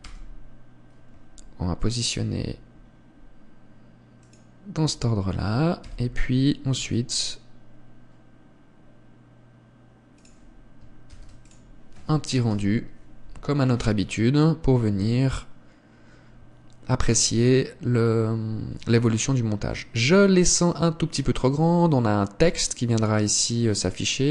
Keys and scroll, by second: 6.3 g, 11.6 ctrl+s.